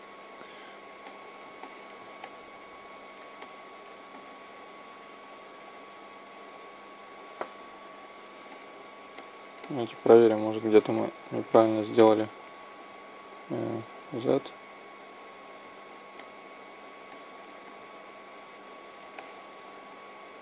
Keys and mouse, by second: 1.5-3.0 middle drag, 4.8-5.9 middle drag, 7.7 u, 9.0 middle click, 9.3-11.0 middle drag, 11.4 middle click, 12.1 middle click, 12.3 middle click, 12.7 x, 13.9 z, 15.5 a, 19.2-20.4 middle drag.